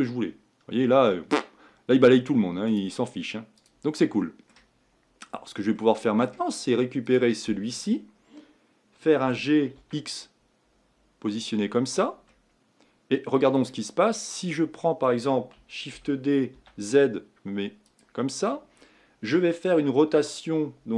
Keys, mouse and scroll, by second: 2.7-4.1 drag, 4.1 middle click, 4.8-5.8 scroll up 7, 5.8-7.2 middle drag, 7.2 click, 9.3 g, 12.3-16.0 middle drag, 16.0 shift+d.